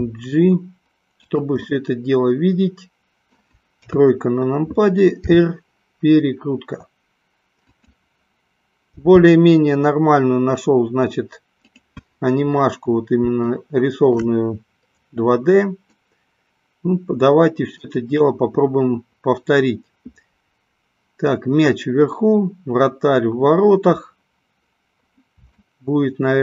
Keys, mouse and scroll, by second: 1.3 click, 1.6-3.3 middle drag, 3.7 KP_1, 5.3 r, 7.7 click, 8.9 g, 11.7 click, 13.4 shift+middle click, 15.9 scroll up 1, 16.2-17.8 middle drag, 25.6 shift+middle click.